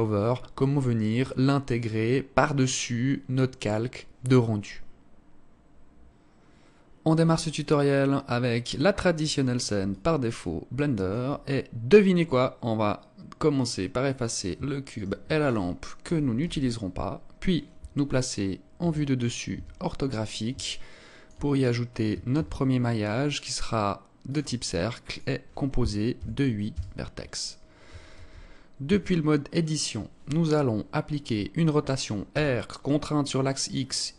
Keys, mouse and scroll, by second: 9.9 alt+click, 12.1-13.0 scroll up 1, 13.0 scroll down 1, 14.9 shift+right click, 16.0 Delete, 18.7 KP_7, 19.4 KP_5, 20.6 alt+shift+click, 21.4-22.1 scroll up 2, 22.2 shift+a, 24.9 click, 28.0 ctrl+space, 28.3-28.7 scroll up 2, 28.7 Tab, 32.2 r.